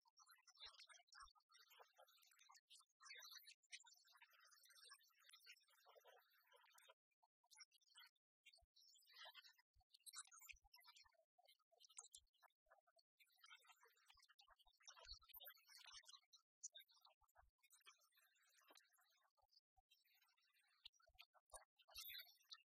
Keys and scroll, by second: 0.7 ctrl+j.